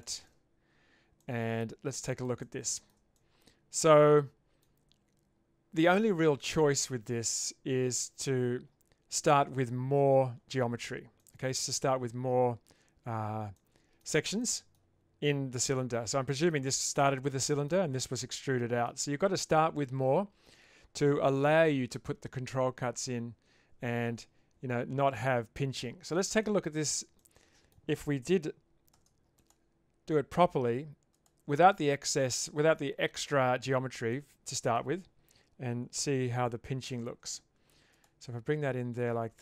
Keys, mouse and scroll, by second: 0.3 Tab, 1.3-2.2 middle drag, 2.5-2.9 shift+middle drag, 3.1-4.6 middle drag, 11.2 middle click, 13.6-14.0 shift+middle drag, 14.5 middle drag, 16.3 middle click, 17.5 middle click, 18.6 middle click, 26.4-26.8 shift+middle drag, 27.2-27.7 middle drag, 28.9 ctrl+r, 34.1-34.8 middle drag, 37.0 ctrl+r.